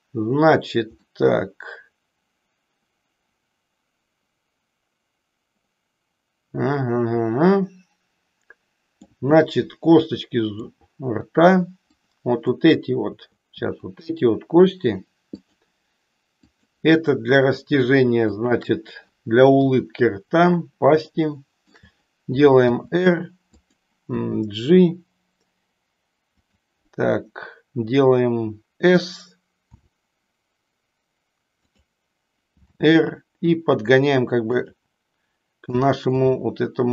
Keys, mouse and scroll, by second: 0.9-9.2 middle drag, 9.4-10.8 middle drag, 11.9 click, 13.8 shift+click, 15.4 shift+click, 16.4 shift+click, 17.4 shift+click, 18.4 shift+click, 19.7 KP_3, 21.2 shift+middle click, 22.7 r, 24.1 g, 26.5 click, 29.5 s, 31.7 click, 34.7 click, 36.2-36.9 shift+middle drag.